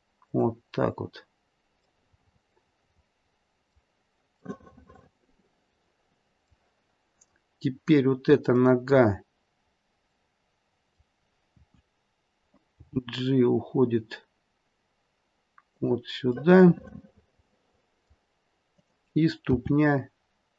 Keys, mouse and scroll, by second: 2.0 middle click, 2.2 middle click, 2.8 middle click, 3.0 middle click, 4.4 middle click, 6.9-7.5 scroll up 1, 7.5-8.4 scroll down 1, 8.4 click, 9.7-10.2 scroll down 2, 10.2 middle click, 12.7 KP_3, 12.7 g, 16.3 middle click, 17.4 middle click, 18.6 click, 19.8 r.